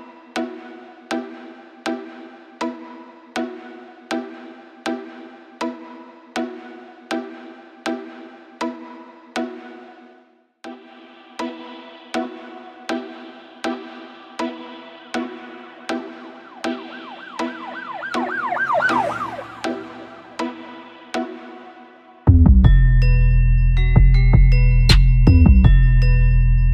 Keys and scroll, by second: 0.4 super+u, 0.8 Return, 5.3 space, 8.9 super+z, 12.5 space, 18.5 super+-, 18.5 super+-, 18.6 super+=, 18.7 super+=, 21.2 super+-, 21.2 super+-, 23.3 Return, 23.5 super+-, 23.6 super+=, 26.0-26.7 typing.